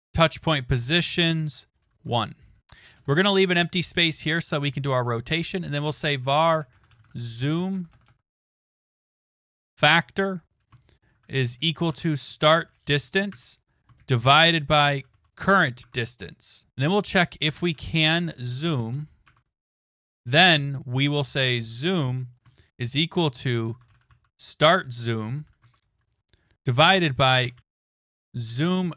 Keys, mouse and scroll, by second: 0.0-2.1 typing, 2.9 Return, 3.1 Return, 5.4-9.9 typing, 11.3-19.1 typing, 23.3-28.9 typing.